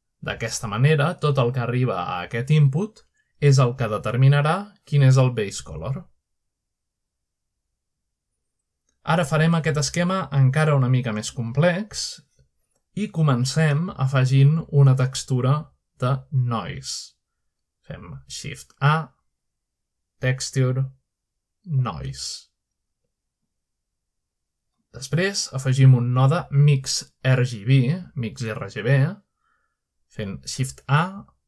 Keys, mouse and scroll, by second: 2.0-3.8 drag, 6.0-7.1 drag, 7.6-10.8 drag, 11.1-12.0 scroll down 1, 12.0-16.1 drag, 17.5 scroll down 1, 18.0 scroll up 1, 19.9 shift+a, 21.9 click, 23.6 click, 24.8 typing, 25.6 click, 26.7-27.9 drag, 28.8 typing, 29.9 typing.